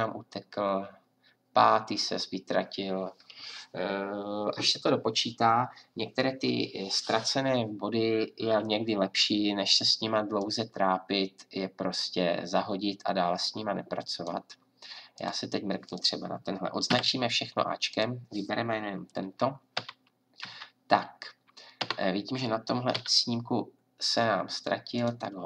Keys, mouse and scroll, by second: 16.9 a, 19.0 right click, 19.8 Right, 20.4 Left, 21.8 Right, 22.9 g.